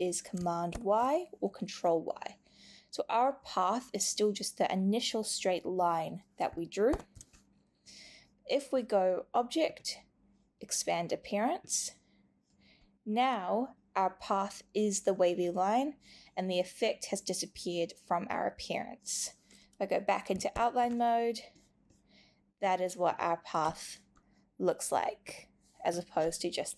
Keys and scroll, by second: 0.7 super+y, 6.9 super+y, 20.5 super+y.